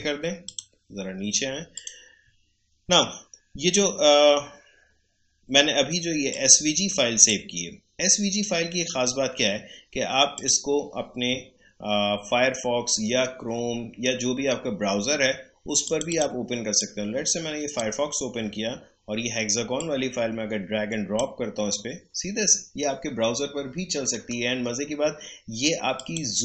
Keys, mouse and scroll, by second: 6.3-9.9 drag, 10.3 click, 15.8-23.7 drag, 24.1 right click, 25.9 click.